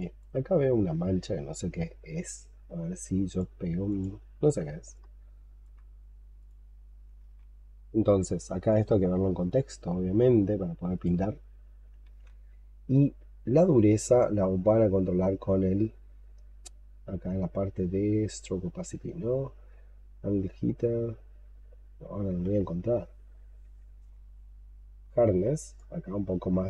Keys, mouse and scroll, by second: 4.8 alt+click, 7.0 alt+click, 7.1 ctrl+z, 7.5-8.1 scroll down 3, 11.9 ctrl+z, 12.8-14.9 scroll up 12, 16.2-16.9 scroll up 6, 17.9-18.5 scroll up 5, 18.5-20.6 scroll down 7, 20.6-21.4 scroll down 2, 21.4-22.3 scroll up 2, 22.5-23.4 scroll up 3, 23.4-26.6 scroll down 8.